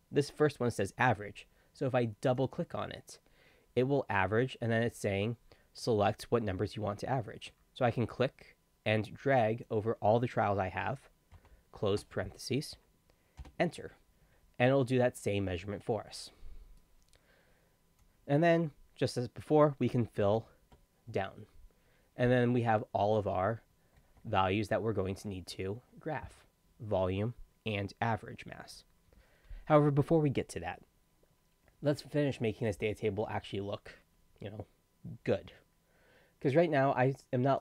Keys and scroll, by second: 11.3 shift+0, 13.4 Return, 20.2 ctrl+d.